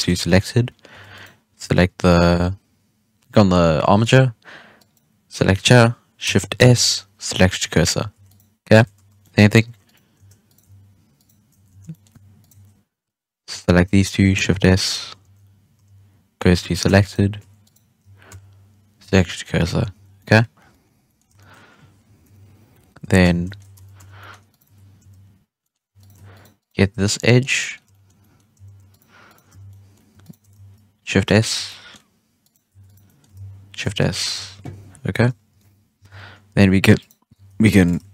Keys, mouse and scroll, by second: 0.2 middle click, 0.9 Tab, 1.1 right click, 1.6 Tab, 4.7 right click, 6.5 shift+s, 8.1 Tab, 8.2 right click, 8.7 Tab, 8.9 3, 9.1-9.6 middle drag, 9.6 2, 9.8 right click, 10.4 right click, 11.1 shift+right click, 11.7 ctrl+z, 11.8-12.3 middle drag, 12.3 shift+right click, 14.5 shift+a, 15.2 shift+s, 15.8 shift+s, 16.8 Tab, 17.0 right click, 17.3 Tab, 17.6 right click, 18.2 shift+s, 19.1 scroll down 1, 19.2-19.6 middle drag, 19.6 scroll up 2, 19.9 Tab, 20.0-20.6 scroll down 2, 20.1-20.5 middle drag, 20.6 middle drag, 20.9 scroll up 2, 21.0 middle click, 21.1 scroll down 2, 21.3-22.2 shift+middle drag, 22.2-25.8 typing, 22.7 scroll up 3, 23.0 Tab, 23.4 middle drag, 23.7 Tab, 24.0 scroll down 2, 24.1-24.4 middle drag, 24.4 right click, 24.6 Tab, 25.5 middle drag, 25.9 right click, 26.3 shift+right click, 26.5 shift+right click, 27.1-28.0 middle drag, 28.0 scroll up 2, 28.1-28.5 middle drag, 28.5 z, 28.8 shift+right click, 29.2 shift+right click, 29.4 z, 29.6-30.2 middle drag, 30.2 shift+right click, 30.6 shift+s, 31.5 Tab, 31.6-32.4 middle drag, 32.4 right click, 32.6 Tab, 32.8 right click, 33.0-33.3 middle drag, 33.3-35.9 typing, 34.0 shift+middle drag, 36.2-36.9 scroll up 3, 36.9 right click, 37.3 g.